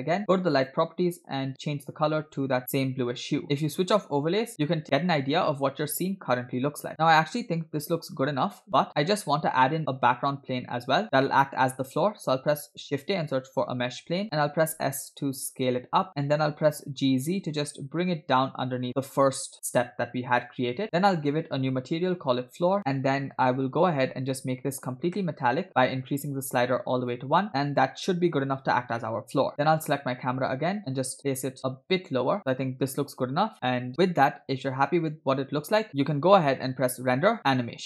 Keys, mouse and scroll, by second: 0.6 click, 1.6 click, 3.4 scroll down 1, 3.8 click, 4.5 shift+middle click, 6.9 click, 6.9-7.3 scroll down 1, 6.9 space, 12.9 shift+a, 14.7 s, 16.7 g, 21.2 click, 22.1-23.5 drag, 25.0 click, 26.2-27.2 drag, 27.5 middle click, 27.5 scroll down 1, 28.3-28.7 scroll up 1, 29.8 click, 31.2 g, 33.9 scroll down 2, 35.7-36.4 scroll down 2, 37.0-37.8 drag.